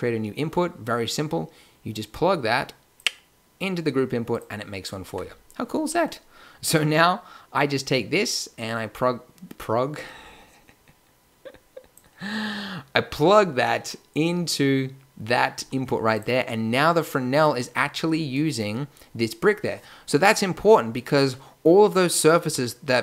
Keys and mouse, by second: 5.0 Tab, 15.5 g.